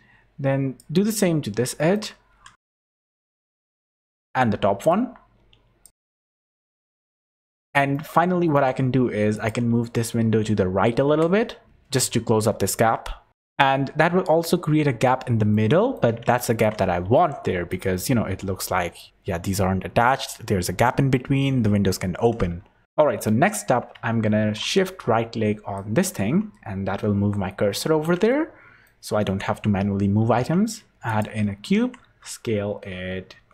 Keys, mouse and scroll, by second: 1.0-1.3 scroll up 9, 1.7 shift+middle click, 2.1 scroll up 2, 2.3 g, 3.5 scroll down 10, 3.8 shift+middle click, 4.1 scroll up 5, 4.8 click, 6.0 scroll up 1, 6.1 g, 6.9 scroll down 6, 7.0 Tab, 7.2 z, 7.4 shift+middle click, 7.6 click, 7.9 shift+middle click, 9.3 click, 9.7 scroll up 2, 10.7 scroll up 4, 11.2 scroll down 2, 11.6-12.1 scroll up 1, 11.6 g, 13.3 shift+middle click, 13.3 scroll down 5, 13.3 click, 15.5 middle click, 16.2 shift+middle click, 16.8 scroll up 6, 17.0 z, 17.6 click, 22.4 z, 22.8 shift+middle click, 22.8-23.2 scroll down 3, 23.6 scroll up 6, 24.6 scroll up 4, 25.7 shift+right click, 27.7 scroll up 5, 28.2 shift+middle click, 30.1 shift+a, 31.7 Tab, 32.0 s.